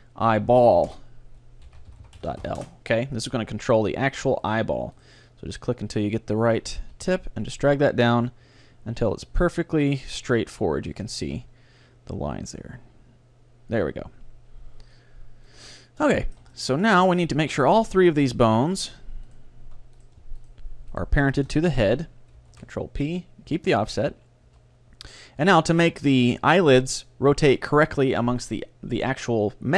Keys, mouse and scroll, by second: 2.1 l, 4.5-6.8 right drag, 6.9 g, 10.4-12.1 drag, 11.1 middle click, 11.3 right click, 11.9-13.5 middle drag, 12.5 g, 13.9-16.9 drag, 14.1 middle click, 15.6 middle click, 15.8 middle click, 16.3 right click, 16.4 middle click, 16.5 right click, 16.6-18.3 middle drag, 18.7-23.5 right drag, 22.6 ctrl+p, 24.1-25.5 middle drag, 24.5 a, 25.5-26.6 right drag, 26.5 middle click, 26.7 middle click, 26.7-28.0 right drag, 28.0 middle click.